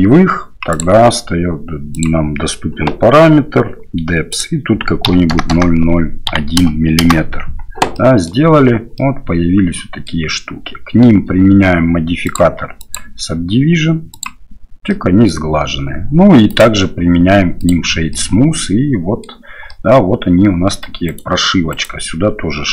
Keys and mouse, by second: 5.5-8.0 drag, 5.5 KP_0, 8.0 middle drag, 9.0-9.6 drag, 9.6-10.1 middle drag, 14.9 middle click, 16.5-17.9 drag, 18.1-19.2 drag, 19.7-20.8 middle drag, 21.1 right click, 21.7 right click.